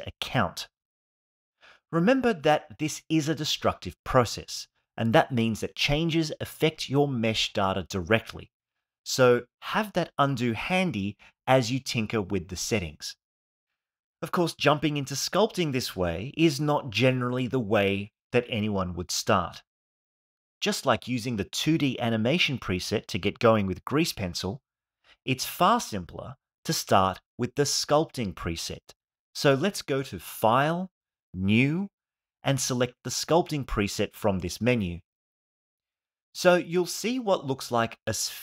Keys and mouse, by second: 1.4 ctrl+z, 2.6-9.7 drag, 30.9-34.5 drag, 37.2-38.4 drag.